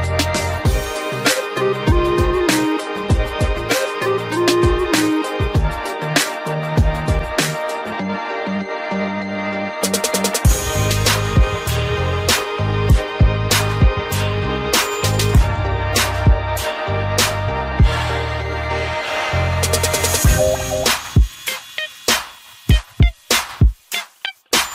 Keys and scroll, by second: 10.5 ctrl+g, 11.5 ctrl+alt+shift+e.